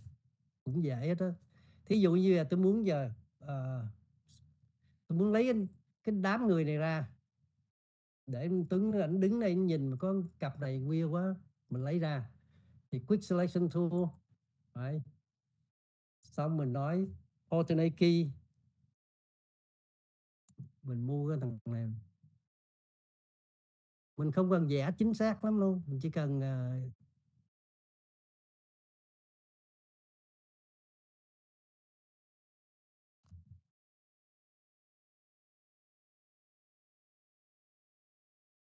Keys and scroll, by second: 1.6 ctrl+0.